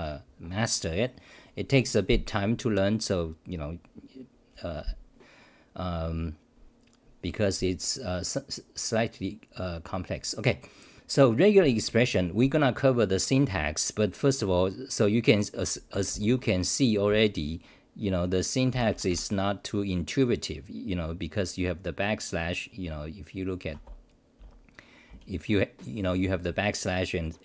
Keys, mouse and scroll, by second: 16.3 typing, 18.7 ctrl+=, 20.5 scroll down 1, 21.6 scroll down 1, 23.7 Home, 24.4 w, 26.1 y.